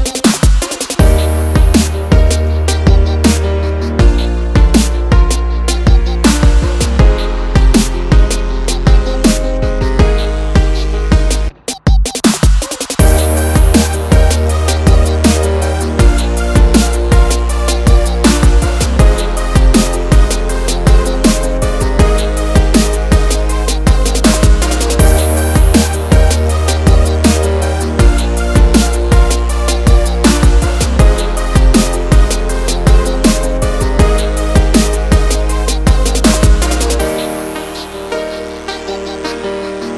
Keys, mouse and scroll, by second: 0.5 click, 3.4 double click, 4.6 ctrl+click, 5.4 scroll up 1, 6.3 click, 7.1 ctrl+alt+click, 8.6 click, 9.4 click, 9.7 ctrl+click, 10.7 scroll down 1, 11.0 click, 11.6 click, 11.8 double click, 13.2 Page_Down, 16.2 double click, 17.6 click, 18.8 ctrl+click, 19.3 double click, 20.5 f, 21.0 j, 21.5-21.8 scroll down 1, 21.8-22.3 scroll up 1, 22.8 click, 23.9 ctrl+z, 24.4 click, 25.4 Page_Down, 26.4 Page_Down, 27.1 Page_Up, 27.7 Page_Down, 27.9 Page_Up, 28.7 ctrl+click, 29.7 click, 30.8 ctrl+click, 31.7 click, 31.9 double click, 32.4 click, 32.6 double click, 32.9 ctrl+click, 33.9 click, 34.1 double click, 35.7 click, 38.0 double click, 38.8 ctrl+click, 39.8 click.